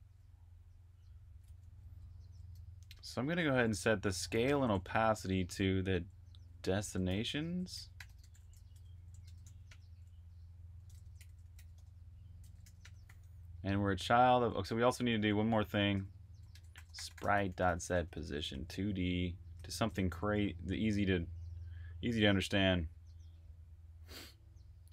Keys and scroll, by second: 1.3-5.3 typing, 6.9-9.5 typing, 10.6-13.4 typing, 15.3-18.9 typing, 20.0 typing, 21.4-22.1 typing.